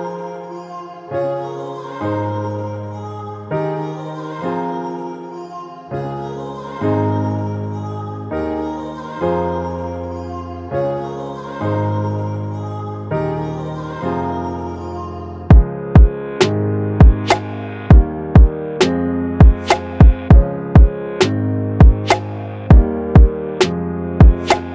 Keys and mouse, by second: 4.2-8.0 middle drag, 8.1 space, 11.9 middle click, 12.7 middle click, 14.2-15.8 middle drag, 16.4 middle click, 18.1 space, 21.7 KP_1, 22.9 s.